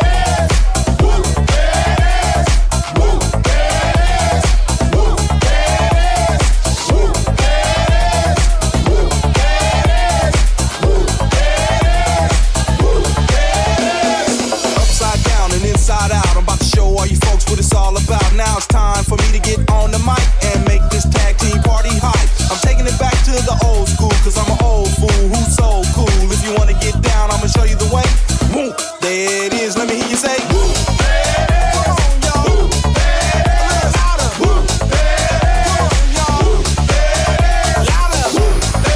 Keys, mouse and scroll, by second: 0.4 1, 0.7 alt+z, 2.2 alt+z, 2.8 g, 3.5-5.4 alt+middle drag, 3.7 alt+z, 5.4-6.6 alt+right drag, 5.4 alt+z, 5.7 g, 6.6-11.4 middle drag, 7.2 z, 8.2 z, 10.6 alt+z, 11.4 middle click, 12.0 g, 13.3 click, 15.6 click, 16.0 click, 16.3 g, 17.5 click, 18.3 g, 19.9 click, 20.3-22.9 right drag, 20.6 g, 22.9-27.1 middle drag, 25.2 Tab, 27.1 right click, 27.2-34.7 shift+middle drag, 34.7-38.9 drag, 35.0 middle click, 35.0 right click.